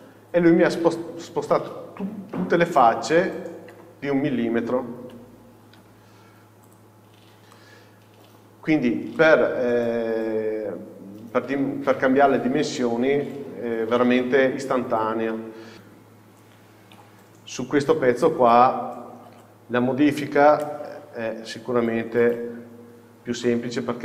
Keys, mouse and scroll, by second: 0.1 Return, 1.3 scroll up 1, 3.3-3.8 scroll down 1, 3.8 Tab, 5.1 z, 7.3-7.7 scroll down 1, 7.7 middle click, 9.5-15.7 middle drag, 15.0 KP_7, 15.7 KP_Divide, 18.1 KP_7, 19.4 alt+a, 22.3 alt+a, 23.0 scroll up 1, 23.5 shift+middle click.